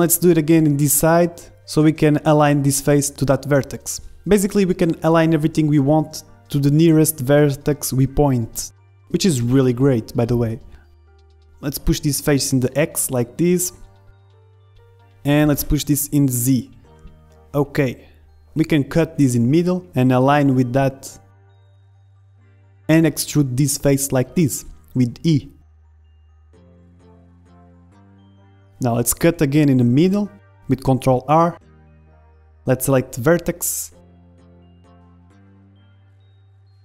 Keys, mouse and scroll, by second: 1.0-2.9 drag, 1.7-2.9 right drag, 2.9 middle click, 3.1-4.5 drag, 4.5-6.5 middle drag, 6.1 Tab, 6.6 middle click, 8.3 click, 9.1 middle click, 9.6 z, 10.0 click, 10.4 middle click, 11.3 KP_1, 11.3 middle click, 12.1-13.2 middle drag, 13.1-14.1 right drag, 13.5-14.5 drag, 14.8 middle click, 15.5 KP_1, 16.6-17.9 drag, 17.0 right click, 17.9 middle click, 20.1 ctrl+r, 22.2 ctrl+Tab, 22.7-24.2 drag, 23.7 e, 26.9 ctrl+z, 27.3 click, 28.9 middle click, 29.9 ctrl+r, 31.1 ctrl+Tab, 33.5 a, 34.0 b, 35.3-36.8 drag.